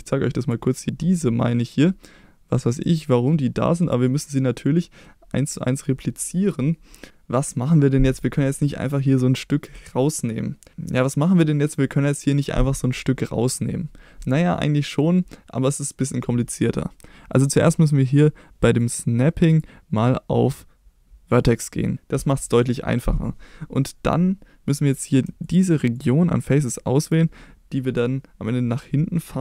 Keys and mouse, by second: 4.8 middle click, 18.8 click, 19.7-21.9 drag, 25.4 shift+click.